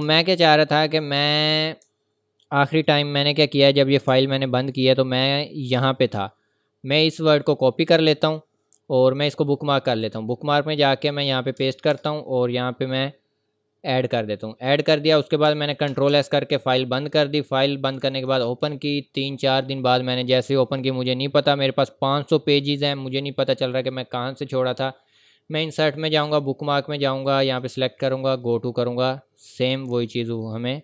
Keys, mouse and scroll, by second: 0.1-0.5 ctrl+scroll up 1, 0.8 scroll up 1, 1.9 ctrl+scroll up 1, 2.7 scroll up 1, 3.0 scroll down 1, 4.3 scroll down 1, 5.8 click, 7.3 right click, 8.2 click, 14.0 click, 16.7 click, 20.3-20.9 scroll down 1, 22.7 scroll up 1, 24.7 click.